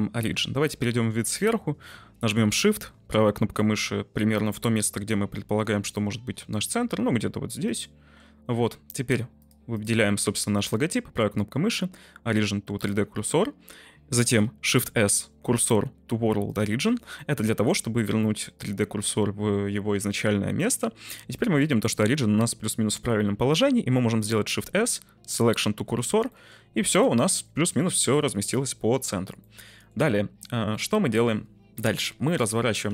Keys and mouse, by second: 7.6 shift+right click, 9.3 click, 9.7 click, 10.5-12.8 drag, 12.8-14.3 right drag, 14.6 shift+s, 17.1-17.6 middle drag, 18.2 middle click, 20.6-21.0 middle drag, 24.5 shift+s, 26.2 middle click, 26.5 `, 29.4-29.8 middle drag, 30.7-31.1 middle drag, 31.7 r, 32.0 x, 32.4 9, 32.5 0.